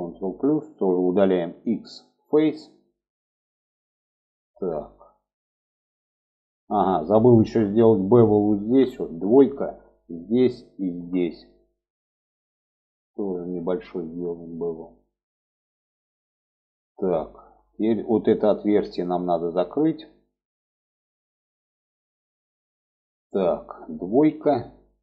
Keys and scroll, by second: 0.8 x, 8.5 2, 23.6 2.